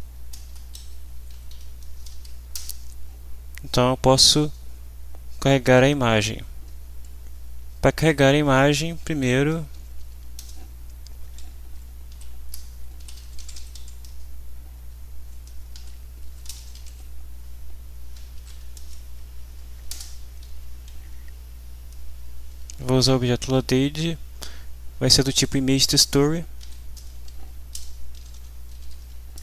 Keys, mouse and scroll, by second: 0.4 BackSpace, 0.7 Left, 1.3 Delete, 1.5 End, 1.8 space, 2.1 shift+;, 2.5 shift+Return, 9.2-10.6 typing, 12.1-14.2 typing, 15.3-17.3 typing, 18.3 shift+t, 18.7 ctrl+shift+space, 19.9 Return, 26.6-29.4 typing.